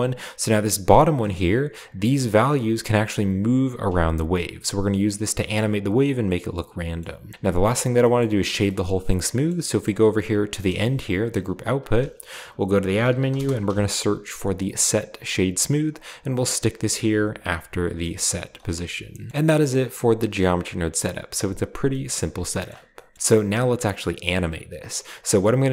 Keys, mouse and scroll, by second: 0.4 click, 1.2 middle click, 2.0-6.0 drag, 6.0-6.9 scroll down 1, 7.3 scroll up 1, 7.5-7.9 scroll down 1, 7.9 middle click, 8.5 scroll down 1, 8.8-10.4 scroll up 2, 10.3-11.9 drag, 10.8 g, 11.8 shift+a, 12.9-13.6 typing, 15.2-17.3 drag, 17.5-17.9 drag, 18.1-19.3 drag, 18.2 g, 18.9-20.0 scroll down 1, 19.0-20.0 middle drag, 19.3 typing, 20.4 typing, 21.7 a, 21.8 middle click, 22.2-23.1 scroll up 1, 22.7 middle click, 23.1 ctrl+b.